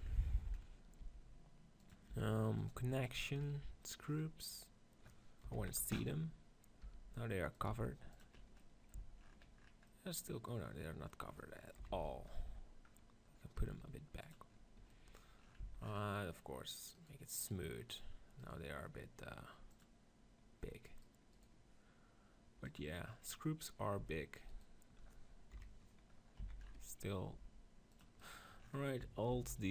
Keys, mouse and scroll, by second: 1.0 g, 1.8-3.3 drag, 2.0 r, 2.6 g, 3.4-4.8 drag, 4.8 middle click, 5.4 KP_7, 5.5 z, 6.7 g, 7.6-8.9 drag, 7.6 r, 8.9 z, 11.7 KP_7, 11.8 z, 13.4 g, 14.2-16.7 drag, 15.5 z, 20.8 click, 23.0 middle click, 23.8 click, 25.4 KP_7, 26.4 z, 27.3 g, 29.2 alt+d.